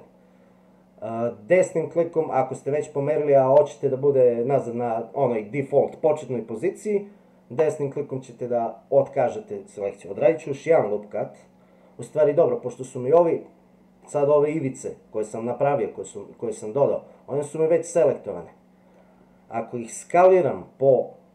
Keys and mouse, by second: 13.4 middle click, 17.6-18.9 middle drag.